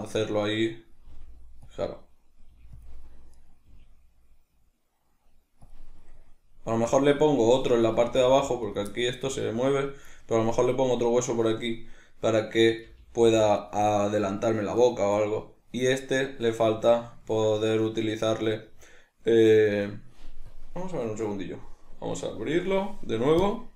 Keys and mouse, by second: 1.1 g, 3.3 right click, 3.7 g, 6.1-7.9 middle drag, 7.9 right click, 14.8 right click, 15.2-20.6 middle drag, 20.6-23.7 drag.